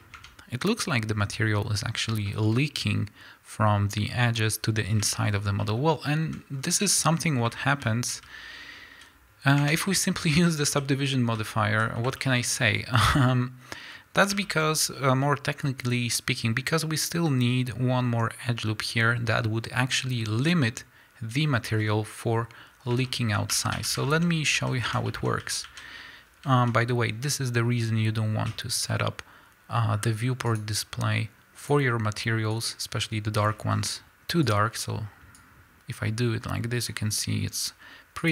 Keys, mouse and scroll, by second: 0.3 Tab, 2.5-9.0 middle drag, 6.5-7.1 scroll up 2, 7.1-7.6 scroll up 1, 9.0 z, 9.8 Tab, 10.5 a, 11.8 z, 12.2 shift+middle click, 12.4 scroll up 1, 12.8 a, 14.5 shift+middle click, 14.6 scroll up 1, 21.8 scroll down 1, 23.1 shift+middle click, 23.5 a, 24.1 shift+middle click, 24.2 scroll up 1, 24.6 a, 25.1 shift+middle click, 25.3 scroll up 1, 25.4 a, 26.0-32.0 middle drag, 26.0-31.3 scroll up 2, 31.3-32.0 scroll up 1, 32.5-35.4 drag.